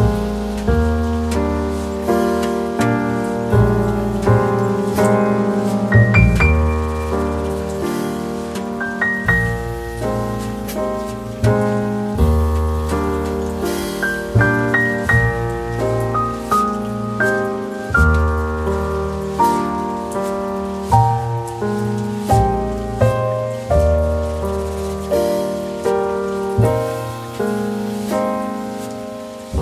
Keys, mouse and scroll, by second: 5.5 ctrl+v, 5.6-6.2 ctrl+scroll up 1, 7.0 ctrl+scroll up 1, 8.9 scroll down 1, 10.1 ctrl+scroll down 1, 12.0 scroll down 1, 13.6 ctrl+scroll up 1, 14.2 middle click, 17.7 Delete.